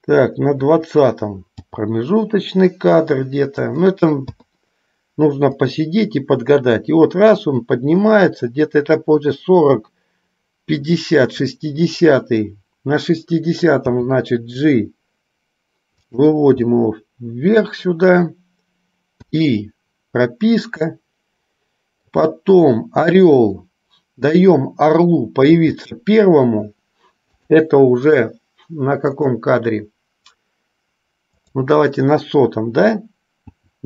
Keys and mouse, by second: 1.9 g, 4.7 i, 5.9-11.8 drag, 14.1 g, 16.8-17.8 middle drag, 19.4 i, 21.1-22.4 middle drag, 23.3 click, 25.7 g, 29.4 click, 31.7 click, 33.6 g.